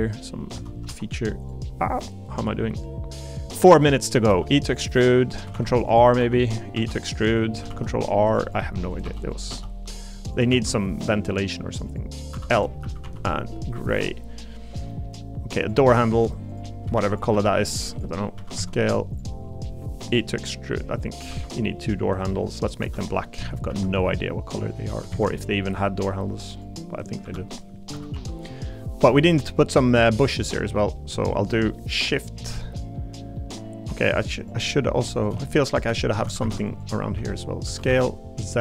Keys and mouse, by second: 0.5 s, 0.8 y, 2.0-3.5 drag, 4.3 e, 4.9 click, 5.5 ctrl+r, 6.2 3, 6.7 e, 7.7 ctrl+r, 8.4 click, 8.9 click, 9.0 3, 9.2 click, 9.5 e, 10.5 ctrl+z, 11.8 click, 12.3 l, 12.8 a, 13.0 g, 13.8 click, 14.2 middle click, 14.9 middle click, 16.5 click, 16.9 shift+d, 17.3 s, 18.3 s, 18.6 z, 19.6 click, 20.8 click, 21.3 e, 21.8-22.8 drag, 22.8 l, 23.7 a, 23.9 h, 25.1 ctrl+z, 26.5 click, 27.2 l, 27.9 a, 28.1 g, 29.0 click, 29.2 middle click, 30.3 click, 30.7 middle click, 31.7 middle click, 32.3 middle click, 32.8 middle click, 33.3 middle click, 34.4 click, 36.2 a, 36.4 a, 36.7 alt+click, 37.6 s, 37.9 z.